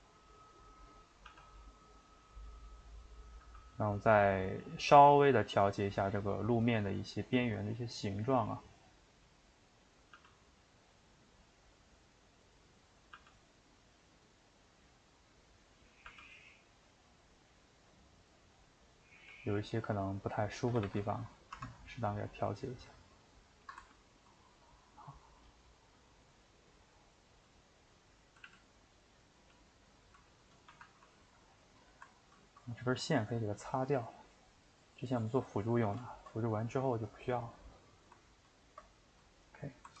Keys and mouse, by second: 1.0 click, 1.3 g, 2.4 middle click, 3.0 click, 3.4 g, 5.7 click, 6.1-7.2 middle drag, 7.2 g, 8.4-10.1 middle drag, 10.1 g, 12.8 click, 13.1 g, 14.7-15.8 middle drag, 15.8 click, 16.1 g, 18.8 click, 19.2 g, 20.2 middle click, 20.7 a, 20.8 a, 21.1 middle click, 21.7 Tab, 22.1-25.5 middle drag, 25.5 click, 27.8-28.4 right drag, 28.4 z, 30.1 z, 30.4 middle click, 30.5 a, 30.7 a, 30.8-33.4 ctrl+middle drag, 33.4-36.1 drag, 36.1-37.1 shift+middle drag, 37.1 click, 37.6-40.0 middle drag.